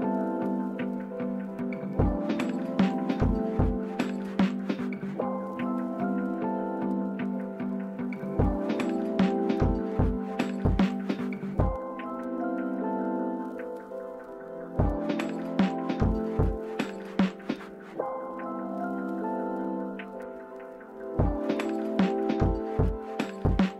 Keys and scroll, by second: 5.6-5.9 typing, 7.0 Return, 17.8 f, 22.3 typing.